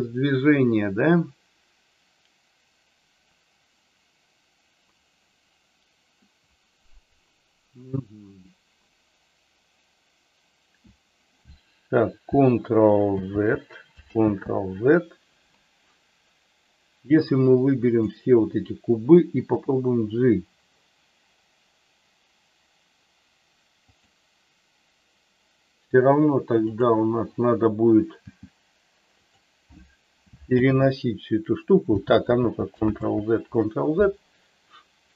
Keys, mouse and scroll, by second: 13.0 ctrl+z, 14.0 ctrl+z, 17.2 click, 19.4 g, 23.9 click, 26.6 click, 28.1 g, 30.5 ctrl+z, 32.1 ctrl+z, 32.8 ctrl+z.